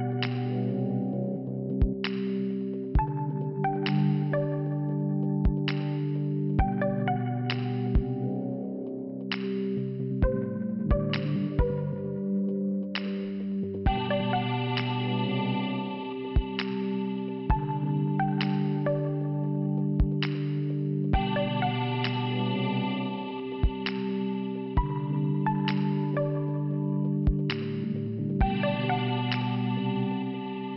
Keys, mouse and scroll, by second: 0.8 click, 6.1 click, 9.0 click, 14.3 click, 14.6 click, 14.9 click, 15.3 click, 15.7 scroll up 2, 15.8 scroll down 2, 15.9 scroll up 2, 16.0 scroll down 2, 16.3 scroll up 2, 16.3 scroll down 2, 16.6 scroll up 2, 16.7 scroll down 2, 18.5 click, 20.1 middle click, 20.8 scroll down 2, 20.9 scroll up 1, 21.0 scroll down 1, 21.2 scroll up 2, 23.6 click, 26.0 click, 29.0 click, 29.3 click, 30.5 middle click.